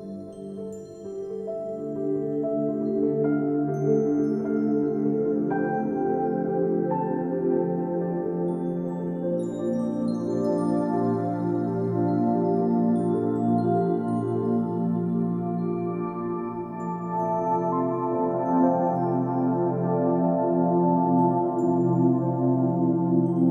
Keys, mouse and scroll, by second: 0.0 click, 0.1 scroll down 1, 0.2 middle click, 0.4 right click, 0.7 click, 0.8-5.4 typing, 1.1 middle click, 1.3 scroll down 1, 1.4 click, 1.5 scroll up 1, 1.7 click, 3.0 click, 5.4 click, 5.6 click, 5.7 ctrl+z, 5.8 click, 6.0 ctrl+z, 6.0 click, 6.1 ctrl+z, 6.4-6.9 scroll up 4, 6.5 shift+middle click, 6.7 click, 6.8 middle click, 6.9 click, 7.1 middle click, 7.2 ctrl+z, 7.3 ctrl+z, 7.3 click, 7.8 middle click, 8.0 scroll down 2, 8.1 scroll up 2, 8.2 click, 8.7 drag, 9.0 ctrl+s, 9.0 click, 9.2 scroll down 1, 9.4 click, 9.5 s, 9.7 click, 9.8 g, 10.1 click, 10.3 g, 10.6 g, 10.9 click, 12.5 click, 12.8 click, 12.9 middle click, 14.2 ctrl+s, 14.2 middle drag, 14.5 click, 14.5 scroll down 6, 14.6 shift+middle click, 14.7 scroll up 1, 14.7 scroll down 1, 14.8 shift+middle click, 14.9 click, 15.1 click, 15.2-15.7 scroll up 7, 15.2 shift+middle click, 15.5 shift+middle click, 15.6 shift+middle click, 15.7 shift+middle click, 15.7 shift+middle click, 15.8 shift+a, 16.0-16.8 scroll down 5, 16.1 shift+middle click, 16.4 click, 16.5 shift+middle click, 16.8 shift+middle click, 16.8-17.2 scroll up 6, 16.9 shift+middle click, 17.0 shift+middle click, 17.2 shift+middle click, 17.3 shift+middle click, 17.5-17.8 scroll down 3, 17.5 shift+middle drag, 17.7 shift+middle click, 17.8 g, 20.0 shift+middle click, 20.2 click, 20.9 click, 20.9 scroll down 2, 21.0 scroll up 2, 21.8 click, 21.9 scroll down 1, 22.1 scroll up 2, 22.5 scroll down 5, 22.5-23.5 typing, 22.7 shift+middle click, 23.0 scroll up 5, 23.1 shift+middle click, 23.2 shift+middle click, 23.3 shift+middle click.